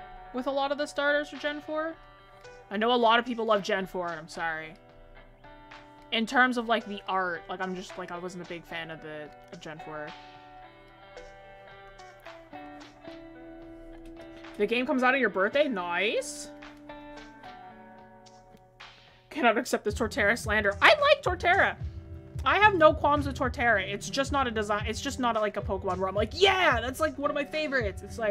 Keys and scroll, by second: 13.5 ctrl+z, 18.4 ctrl+z, 23.9 ctrl+z.